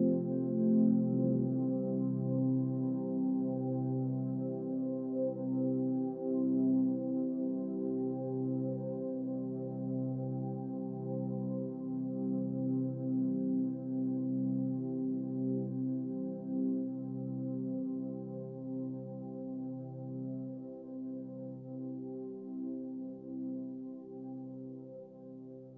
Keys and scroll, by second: 0.6 Right, 0.7 Up, 0.7 Right, 0.8 Up, 0.9 Right, 0.9 Up, 1.0 Right, 1.1 Up, 1.9 Left, 2.0 Up, 2.9 Up, 3.2 Right, 3.4 Down, 3.8 Left, 4.2 Down, 4.3 Left, 4.4 Down, 4.5 Left, 4.7 Up, 5.3 Right, 16.3 Down, 16.4 Right, 16.5 Down, 16.6 Right, 16.7 Down, 16.8 Up, 16.9 Right, 17.0 Up, 17.1 Left, 17.5 Up, 18.0 Left, 18.3 Down, 20.0 Up, 20.8 Down, 21.0 Right, 21.5 Up, 23.4 Down, 23.6 Right, 23.8 Down, 24.9 Left, 25.0 Down, 25.2 Right, 25.6 Down.